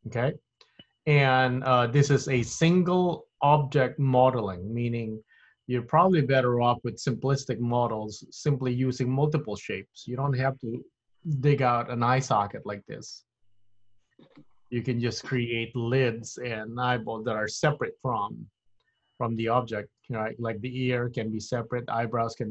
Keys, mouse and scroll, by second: 12.6-13.2 scroll up 4, 13.2 middle click, 15.2 scroll down 1, 17.7 \.